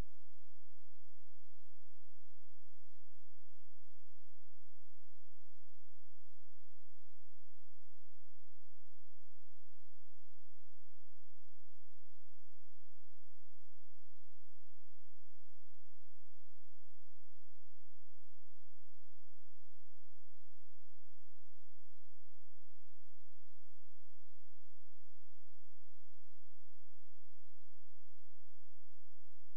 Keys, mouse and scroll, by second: 2.8 space, 3.6 ctrl+z, 4.3 click, 13.2 click, 22.5-22.8 scroll down 1, 22.8-24.7 scroll up 1, 25.1 click, 28.7 ctrl+shift+z, 29.3 ctrl+z.